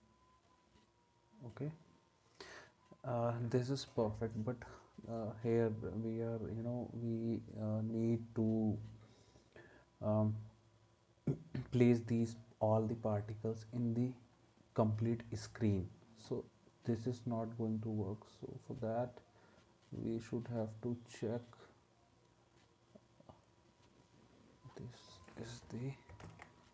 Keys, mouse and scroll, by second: 26.2 ctrl+z.